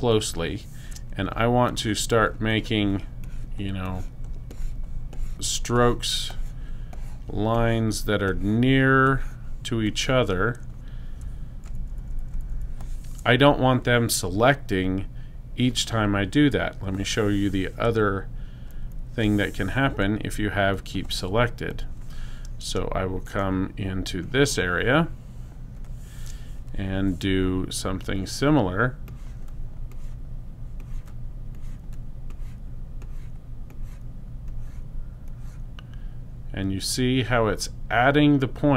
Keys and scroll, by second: 11.2 super+-, 11.9 super+-, 12.3 super+-, 23.3 super+space.